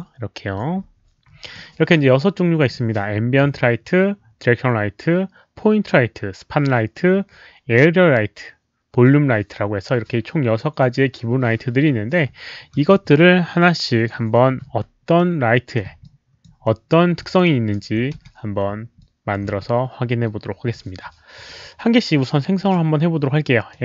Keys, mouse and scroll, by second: 0.5-1.5 drag, 13.9 click, 14.6 r, 15.2 middle click, 16.0-16.4 alt+drag, 16.6 alt+middle click, 17.2 alt+click, 17.5 alt+right click, 18.1 w, 19.0-19.4 alt+drag, 19.5 q, 22.6 click, 23.7 click.